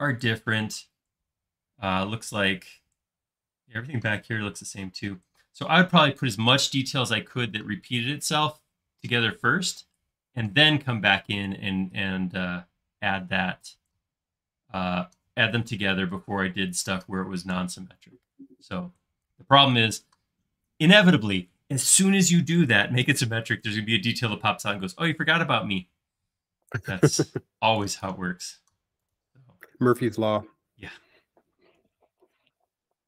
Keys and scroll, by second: 31.8 f, 32.5 space.